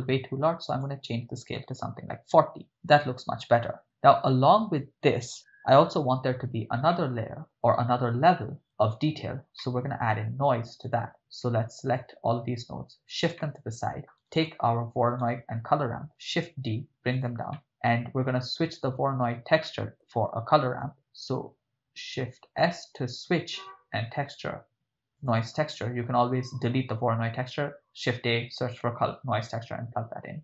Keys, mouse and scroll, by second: 0.7-2.3 drag, 6.9-7.4 ctrl+middle drag, 8.3-8.6 drag, 9.6 ctrl+middle click, 10.9 shift+drag, 12.0-13.2 drag, 13.4 middle click, 14.3 right click, 15.1 shift+right click, 16.3 shift+d, 17.1 click, 17.5 ctrl+middle click, 17.9 middle click, 18.7 click, 20.9 shift+s.